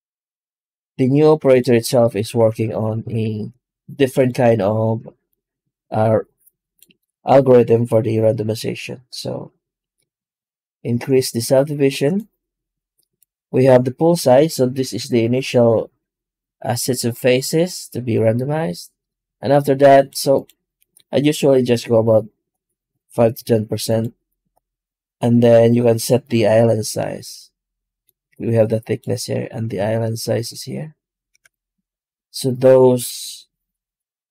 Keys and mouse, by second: 1.2 x, 1.9 right click, 2.2 Tab, 2.6 Tab, 2.9 shift+q.